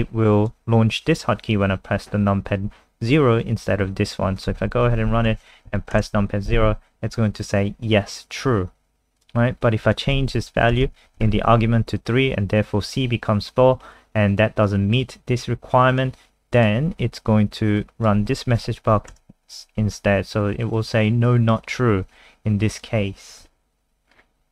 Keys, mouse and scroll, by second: 4.6 ctrl+s, 5.3 F5, 5.9 KP_0, 9.2 click, 10.5 Left, 10.7 typing, 11.2 ctrl+s, 11.3-12.2 scroll up 1, 12.3 scroll down 1, 14.7 click, 19.1 KP_0, 22.7 click, 23.5 super+3, 24.1-24.5 scroll down 4.